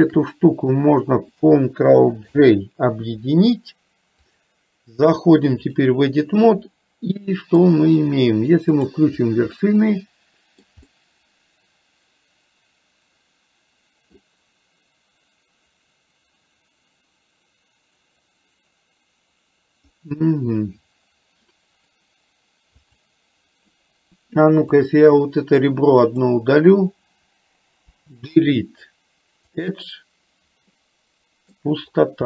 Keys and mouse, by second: 0.0 shift+click, 2.4 ctrl+j, 4.4-5.9 drag, 6.8 middle click, 8.9 click, 9.7-10.8 middle drag, 10.9-14.3 middle drag, 22.9 click, 27.9 Delete, 30.8 middle click.